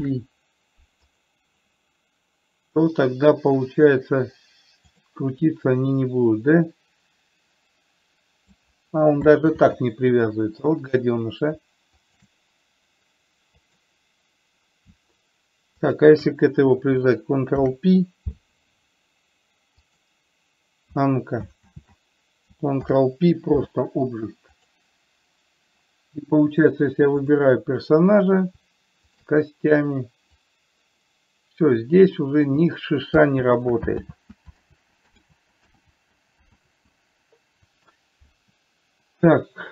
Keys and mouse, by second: 0.2 ctrl+p, 5.2 click, 6.3-8.9 drag, 9.8 ctrl+z, 12.4 click, 13.9 click, 16.2 shift+click, 17.8 ctrl+p, 22.0 ctrl+z, 23.2 ctrl+p, 27.5 click, 30.8-32.8 drag, 33.8 ctrl+z, 35.0 ctrl+z, 35.7 ctrl+z, 36.2 ctrl+z.